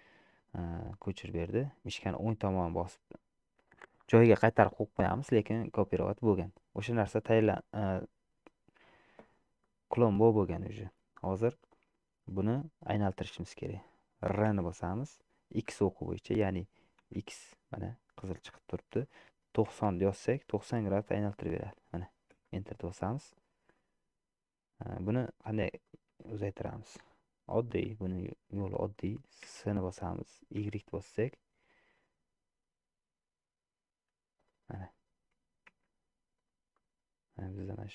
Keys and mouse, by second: 6.4-7.4 middle drag, 9.7 middle click, 14.6 r, 23.8-25.0 middle drag, 26.0 shift+middle click, 26.6 middle click, 28.7 middle click, 29.7 s, 35.8 Tab, 36.8-37.9 middle drag.